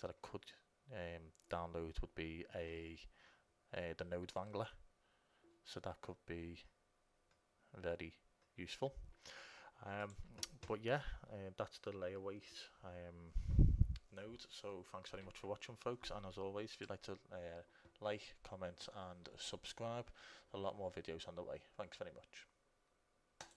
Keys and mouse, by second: 10.2-12.1 drag.